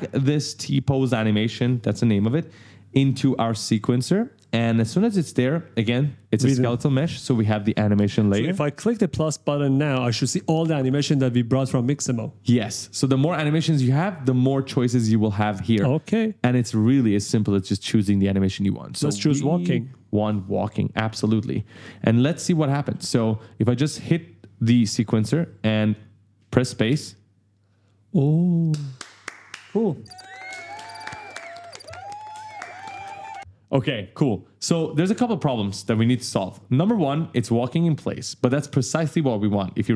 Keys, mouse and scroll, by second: 9.7 click, 12.6-12.9 scroll down 1, 13.2 scroll down 1, 15.2-15.5 scroll up 1, 18.2-18.7 scroll down 1, 19.0-19.3 scroll down 1, 20.0 click, 20.7-23.1 typing, 20.9 right click, 21.8 scroll down 1, 22.1 right click, 24.4 click, 24.9 click, 26.6 space, 34.7 click, 36.6 click.